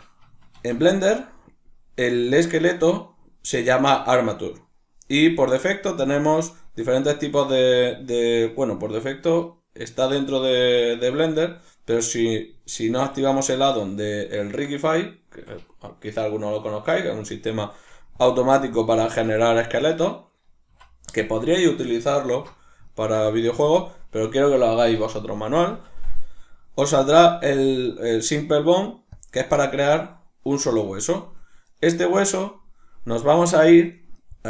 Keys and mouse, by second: 0.6 shift+a, 19.0 ctrl+middle click, 20.7 x, 22.9 ctrl+middle click, 25.8 shift+a, 29.2-34.4 middle drag.